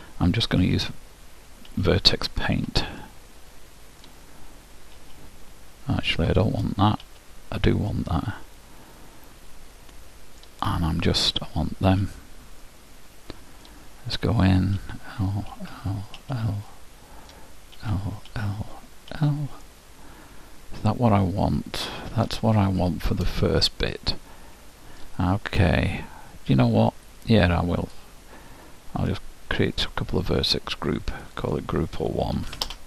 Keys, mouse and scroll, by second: 0.0 l, 0.7 l, 1.8 l, 2.7 l, 3.1-4.9 middle drag, 5.3 l, 6.3 shift+l, 7.1 l, 8.0-10.1 middle drag, 10.9-13.3 middle drag, 12.1 l, 14.9 l, 15.7 l, 15.9 middle click, 16.3 l, 16.8-18.6 middle drag, 18.0 l, 18.4 l, 19.3 l, 19.9-21.7 middle drag, 22.7-25.1 middle drag, 27.9-32.8 drag.